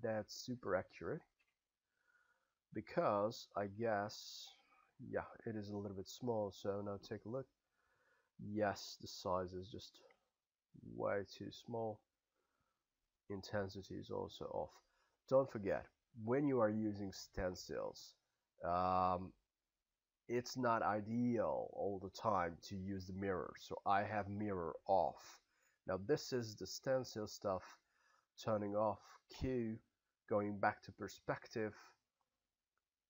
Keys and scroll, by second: 1.4 w, 10.1 b, 29.4 q.